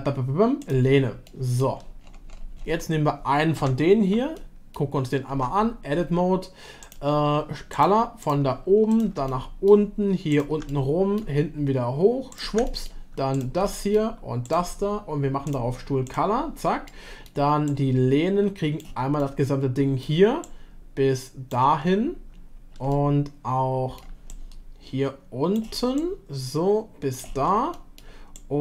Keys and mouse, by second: 1.3-1.6 shift+middle drag, 3.6 /, 4.4-4.7 middle drag, 5.3 Tab, 6.8 click, 7.8 click, 9.3-9.7 middle drag, 10.7-11.2 middle drag, 12.6-12.9 middle drag, 13.6-13.9 middle drag, 15.5-16.8 drag, 16.8-17.3 middle drag, 17.7-18.8 drag, 19.1-20.0 middle drag, 20.5-21.5 shift+drag, 22.9-24.0 middle drag, 24.3-27.5 shift+drag, 27.7 middle click, 28.4-28.6 shift+drag.